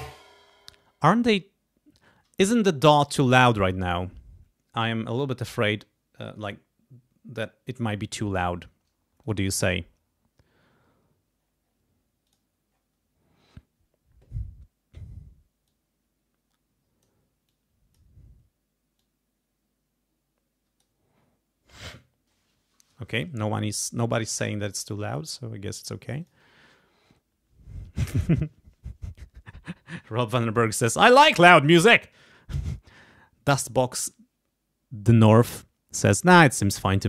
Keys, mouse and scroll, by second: 9.2 click, 11.4-11.9 scroll up 4, 12.2 click, 12.7 scroll down 2, 14.6 scroll down 2, 15.6-17.2 drag, 17.4 click, 18.9-21.0 drag, 25.0 click, 26.2 click.